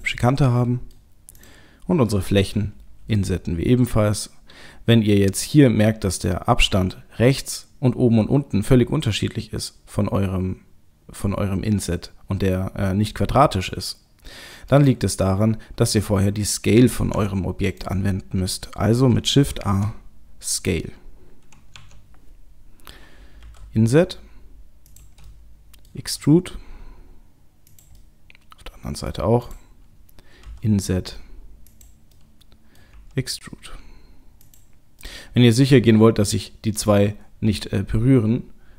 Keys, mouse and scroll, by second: 0.2 middle click, 1.4 click, 3.0 i, 17.0 Tab, 17.7 right click, 19.6 ctrl+a, 21.8 Tab, 23.5 i, 25.3 middle click, 25.9 middle click, 26.0 e, 28.0 middle click, 29.4 click, 30.5 i, 32.3 middle click, 32.4 middle click, 33.0 e, 35.1 middle click.